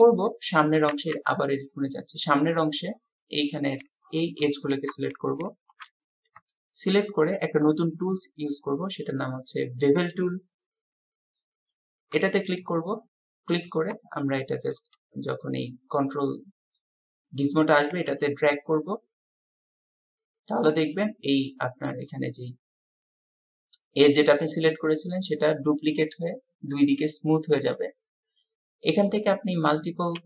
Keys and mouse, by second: 1.0 Tab, 1.4 click, 1.4 middle click, 3.8 click, 5.4 alt+shift+click, 6.5-7.0 shift+drag, 14.1 shift+click, 14.6-27.8 shift+middle drag, 27.8 click, 27.9-30.2 middle drag.